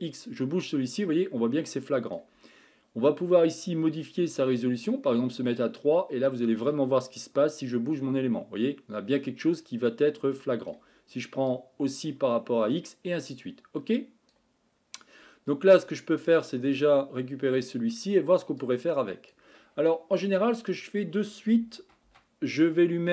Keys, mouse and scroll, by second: 11.7-16.4 drag, 16.4-18.6 scroll down 1, 18.6-23.1 drag.